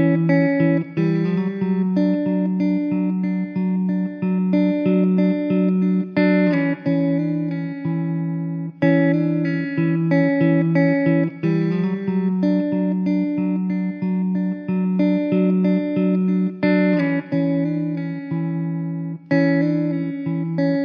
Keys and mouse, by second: 1.2 ctrl+z, 4.0 1, 13.7 alt+w, 14.4 middle click, 17.4 2.